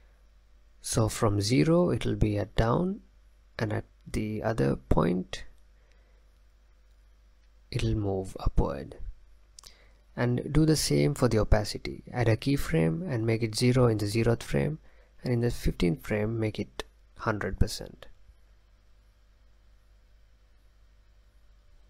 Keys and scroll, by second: 4.5 space, 19.3 space, 21.7 space.